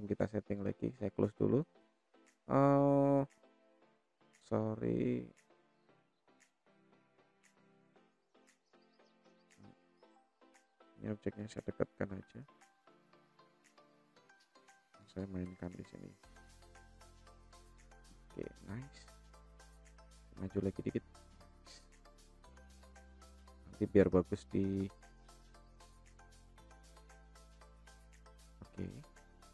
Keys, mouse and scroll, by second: 1.5-2.7 scroll down 1, 2.7-3.8 middle drag, 4.0-4.6 scroll up 1, 4.6 scroll up 1, 4.8 middle click, 5.8-6.2 scroll up 1, 6.2-6.8 scroll down 1, 6.8 middle click, 7.8-8.6 shift+middle drag, 8.9 middle click, 9.8 click, 10.9-11.5 drag, 11.8 click, 12.7-13.5 drag, 14.3-15.6 drag, 16.0 click, 16.9-18.5 drag, 19.0 click, 19.8-21.1 drag, 22.1 middle click, 23.3 middle click, 24.5-25.7 shift+middle drag, 25.9-26.8 scroll up 2, 26.8 middle click, 27.5-28.4 shift+middle drag, 28.7-29.3 scroll down 1, 29.3-29.5 scroll up 1.